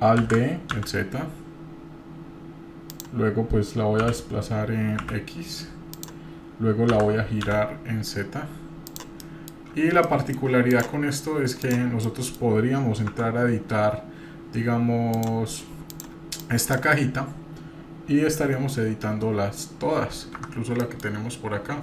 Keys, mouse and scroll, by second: 0.2 alt+d, 4.8 g, 7.4 r, 9.2 middle click, 10.1-10.4 shift+middle drag, 10.7 drag, 11.2 scroll up 2, 11.6 click, 12.1 middle click, 13.1 Tab, 15.1 click, 15.9 click, 16.4 drag, 18.5 g, 20.8 middle click, 21.0-21.8 scroll down 1.